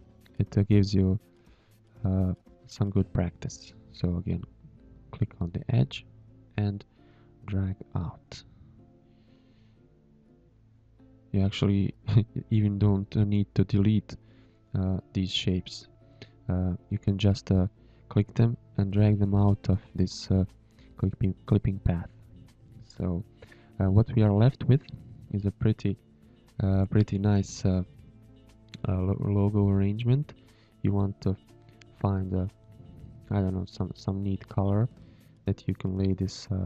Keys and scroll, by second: 0.9 Delete, 2.7 a, 3.2 a, 6.8-9.2 typing, 15.1 space, 15.6 Tab, 15.9 z, 16.4 space, 18.1 a, 23.4 z, 24.7 Tab, 25.4 space, 26.1 m, 28.4 ctrl+x, 28.7 ctrl+b.